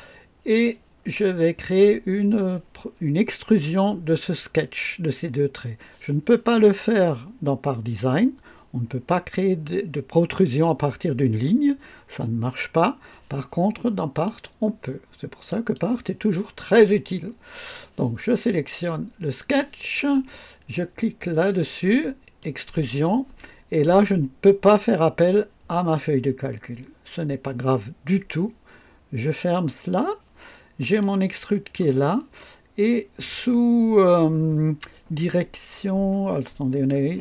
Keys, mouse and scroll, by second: 14.2 click, 15.4 click, 22.3 click, 29.6 click, 30.9 click.